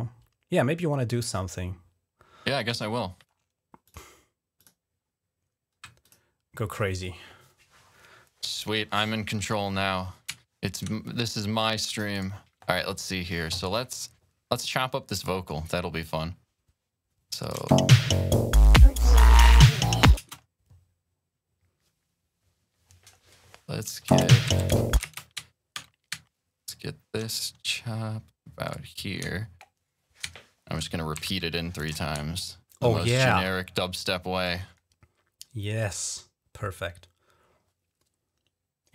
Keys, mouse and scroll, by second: 1.0 click, 3.6 click, 3.9 click, 4.4 click, 5.8 click, 10.5 scroll up 1, 11.9 click, 13.4 click, 15.0 click, 17.2 click, 17.5 click, 17.5 space, 20.1 space, 23.9-25.3 typing, 25.7-26.1 scroll up 2, 28.5 click, 30.1-30.8 ctrl+scroll down 1, 30.9 typing, 31.6-34.0 drag, 34.3-36.0 drag, 36.8 click, 38.2-38.9 drag.